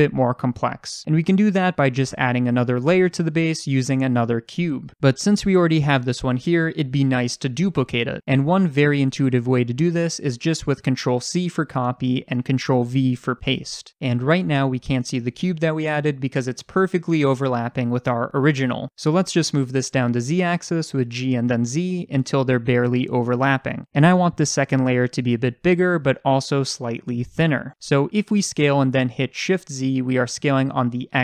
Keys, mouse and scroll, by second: 11.1 ctrl+c, 12.7 ctrl+v, 21.1 g, 23.5 click, 24.9-31.2 middle drag, 26.1-28.4 scroll down 1, 28.4 s.